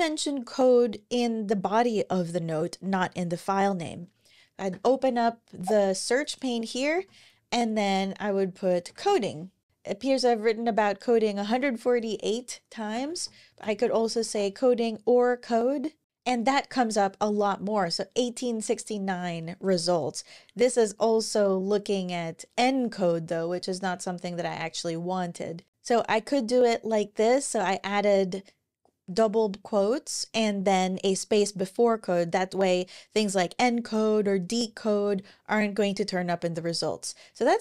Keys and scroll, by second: 3.6 Escape, 4.5 ctrl+super+l, 6.5 super+a, 6.7-9.3 typing, 12.5-14.5 typing, 25.7 super+Right, 25.7 shift+'.